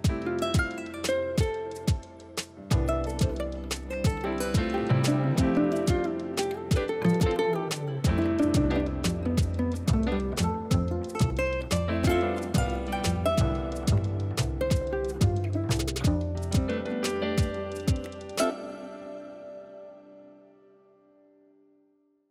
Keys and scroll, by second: 0.4 x, 5.1 ctrl+i, 5.6 x, 9.6 x, 12.0 ctrl+alt+shift+e.